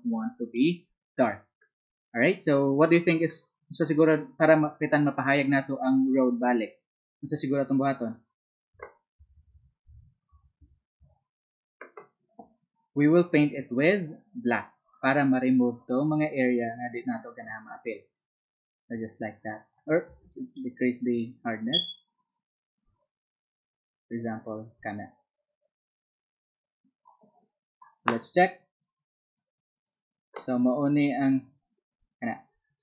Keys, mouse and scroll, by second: 22.2-32.8 drag, 22.2 z.